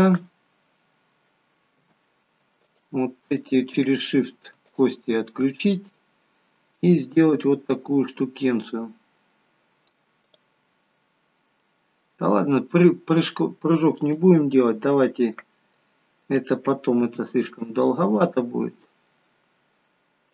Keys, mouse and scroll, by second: 0.0 click, 1.8 a, 2.8 shift+click, 3.7 shift+click, 4.8 shift+click, 5.9 middle click, 10.3 click, 10.3 scroll up 3, 11.6 middle click, 13.3 middle click, 14.1 click, 14.8 middle click, 17.2 middle click, 17.2 g.